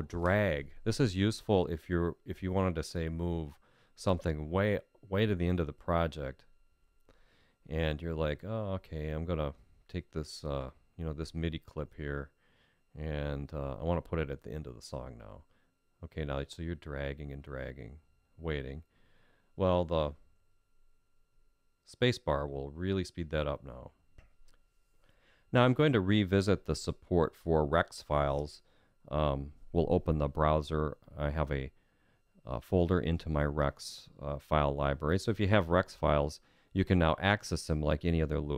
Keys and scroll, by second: 6.7 Home, 24.1 Home, 34.2 F5.